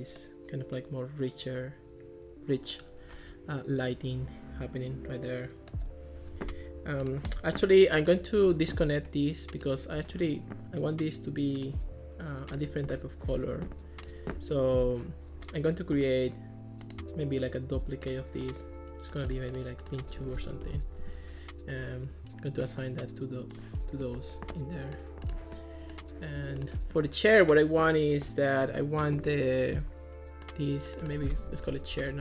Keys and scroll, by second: 20.1 2, 20.7 Return, 31.3-32.2 typing.